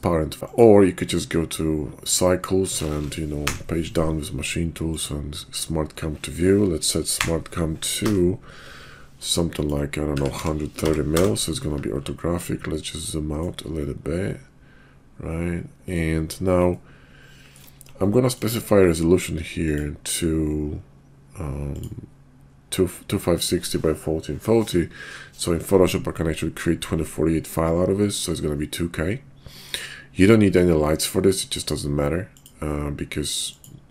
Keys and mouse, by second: 0.4 click, 3.4 Page_Down, 7.1 Page_Down, 8.0 Page_Down, 12.2-13.6 ctrl+drag, 13.8-16.0 ctrl+drag, 16.7 ctrl+click, 18.1 ctrl+click, 19.5 click, 32.4-33.9 drag.